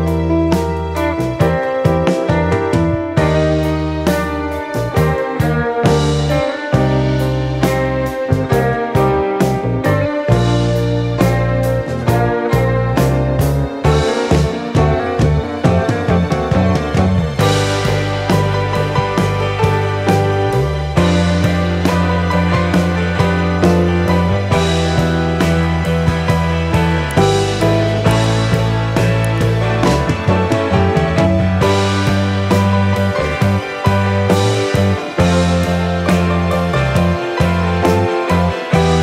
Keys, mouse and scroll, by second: 0.4 F9, 1.3 click, 2.0 ctrl+o, 3.2 scroll down 1, 4.0-4.6 scroll down 1, 4.9 scroll down 1, 5.3-5.7 scroll up 1, 5.7 click, 6.9 click, 12.4 F4, 13.1 click, 14.6 F9, 18.2 ctrl+o, 19.3 scroll down 1, 21.7 scroll down 1, 25.1-26.8 scroll down 1, 27.1 click, 27.9 click, 33.7 F4, 34.5 click, 35.5 F9.